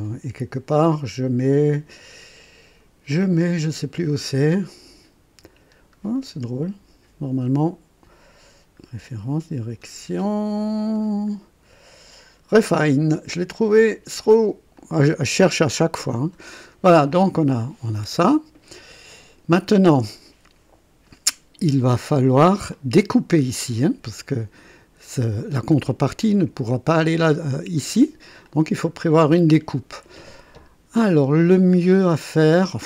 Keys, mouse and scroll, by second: 3.2 scroll down 1, 5.5-5.9 scroll up 1, 9.3 scroll down 1, 10.3-10.6 scroll down 1, 12.8 click, 13.3 click, 14.1 click, 14.8 click, 15.8 scroll up 1, 16.6 scroll down 1, 17.1-19.6 drag, 22.7 click, 24.1-25.5 drag, 28.4 click, 32.0 click.